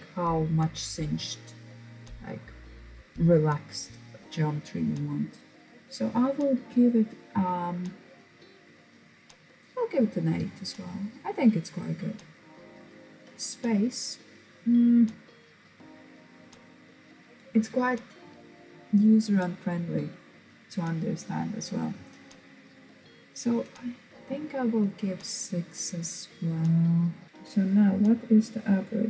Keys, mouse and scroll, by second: 8.7 click, 24.5 click.